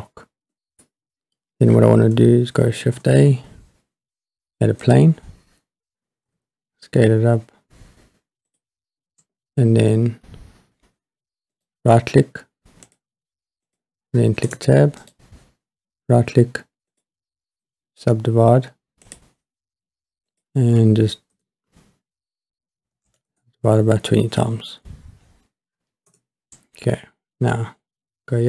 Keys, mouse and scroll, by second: 0.5 middle click, 2.8 shift+a, 6.3 s, 8.5 click, 11.5-12.6 right drag, 12.6 drag, 12.9 click, 13.7 click, 14.5 Tab, 15.0-17.0 right drag, 19.2 click, 20.3-23.3 drag, 26.1 Tab.